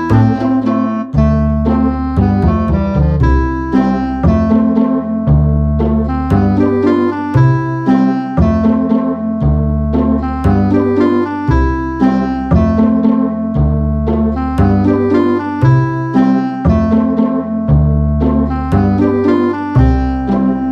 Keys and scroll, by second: 4.4 super+z, 9.5 BackSpace, 13.3 alt+shift+super+z, 14.2 super+z, 19.9 BackSpace, 20.6 shift+super+z.